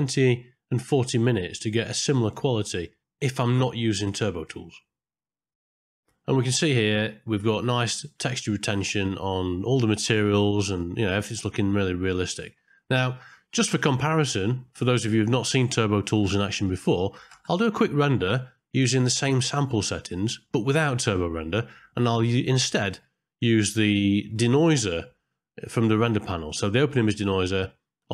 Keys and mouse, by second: 4.2 click, 4.6 ctrl+space, 5.8 middle click, 13.7-14.8 middle drag, 17.4 ctrl+space, 19.3 click, 20.7 middle click, 22.3 middle click, 24.8 click.